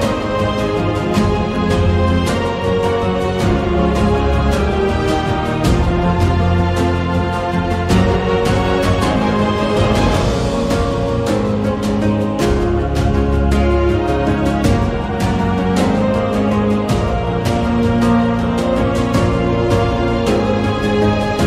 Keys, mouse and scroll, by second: 0.7 g, 5.1 r, 6.8 right click, 8.0 r, 8.9 g, 11.6 r, 14.1 Tab, 15.1 2, 15.7 z, 16.3 click, 16.6 z, 18.1-19.2 drag, 19.8 g.